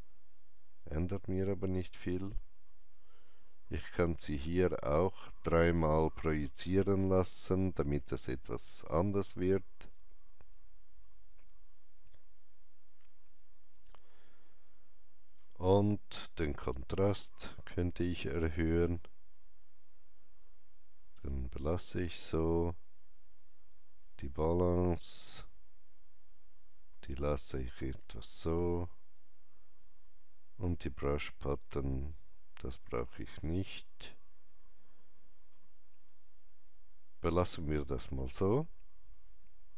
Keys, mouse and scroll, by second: 5.9 KP_3, 6.3 Return, 15.1 KP_Enter, 15.1 scroll down 1, 15.1 KP_3, 17.2-29.7 drag, 27.9 scroll down 1, 29.7-35.4 drag, 34.8-35.4 scroll up 2.